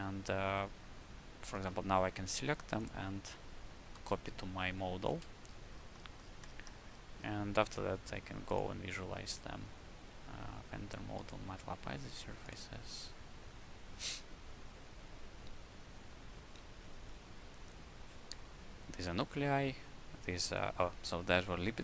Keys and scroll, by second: 1.5 alt+a, 3.0 alt+a, 3.9 shift+a, 5.0 ctrl+space.